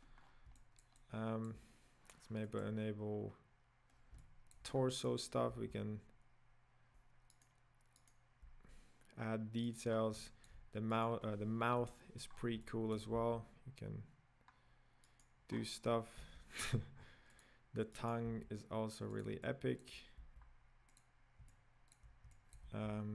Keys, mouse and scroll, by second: 0.2 scroll down 6, 0.6-2.6 middle drag, 2.6 click, 4.2-5.3 shift+middle drag, 5.3 right click, 5.6 g, 8.2 right click, 8.4 g, 10.0 scroll up 4, 10.3-11.2 shift+middle drag, 11.2 right click, 11.9 KP_Decimal, 12.3-12.7 scroll down 7, 12.7-13.2 middle drag, 13.2 g, 15.5-16.2 scroll up 4, 16.2 g, 18.2 right click, 18.5 g, 19.5-20.2 middle drag, 20.2 g, 21.5-22.8 middle drag, 22.8 g.